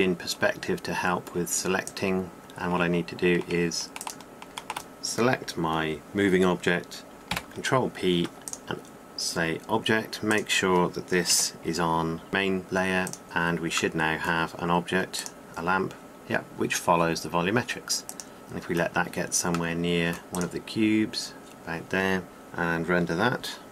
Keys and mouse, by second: 2.4-4.8 drag, 8.1 ctrl+p, 12.1 m, 14.1-15.0 drag, 15.2-16.2 drag, 16.2 middle click, 16.5 click, 16.6 middle click, 17.2 click, 18.0 middle click, 18.3-19.2 drag, 20.3-22.1 drag, 22.1 middle click, 22.3 click.